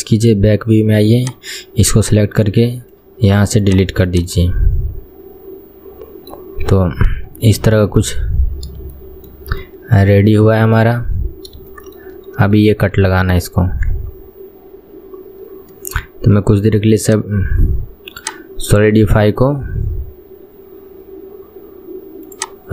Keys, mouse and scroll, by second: 0.1-2.5 scroll up 1, 2.5 click, 3.8-4.2 right drag, 4.2 click, 4.4-6.8 middle drag, 6.8 KP_1, 7.1-7.6 scroll down 4, 7.6 shift+middle click, 8.2-9.1 scroll up 4, 9.1-11.1 shift+middle drag, 11.1 KP_1, 11.4-11.8 scroll down 1, 11.8-14.2 shift+middle drag, 14.2-15.7 scroll up 4, 15.7-16.2 scroll down 2, 17.1 click, 18.3 click, 22.4 drag.